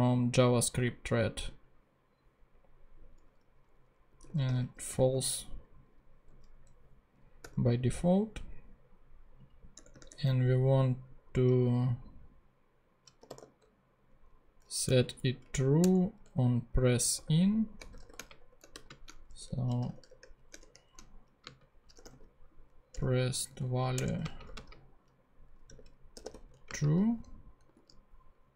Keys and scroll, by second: 3.8-5.1 typing, 7.4 ;, 9.7 Tab, 13.0-13.8 typing, 15.0 Down, 15.8 Return, 17.1-26.8 typing, 22.9 Return, 27.7 super+d.